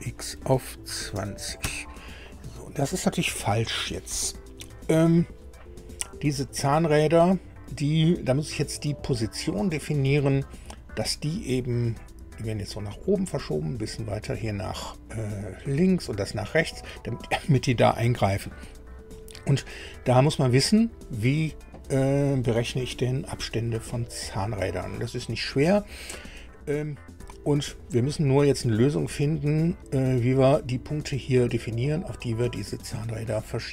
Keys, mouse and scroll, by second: 0.9 KP_2, 1.1 KP_0, 1.6 KP_Enter, 19.8 scroll down 2.